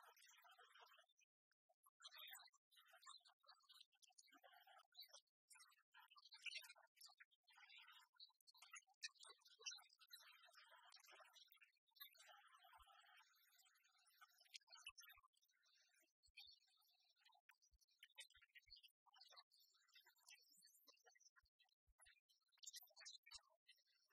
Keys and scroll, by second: 5.2 BackSpace, 8.5 ctrl+d.